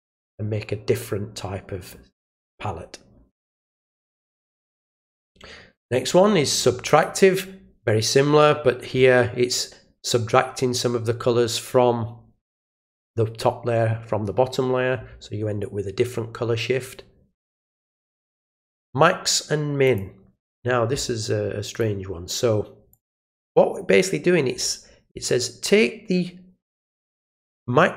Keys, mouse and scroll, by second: 5.1 click, 6.8 click, 17.4 click, 19.8 click, 21.7 click, 22.9 click.